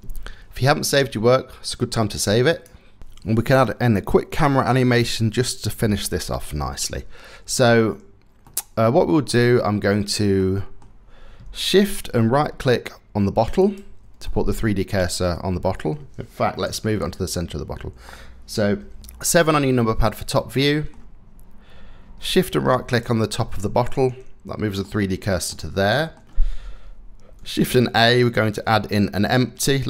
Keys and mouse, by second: 2.2-3.0 drag, 8.1 middle click, 8.3 click, 10.0 click, 13.2 shift+click, 13.9-14.5 drag, 14.5 middle click, 14.6-15.5 drag, 16.3 KP_7, 19.9 shift+drag, 22.6-24.4 shift+middle drag, 25.1 middle click, 27.3 shift+a.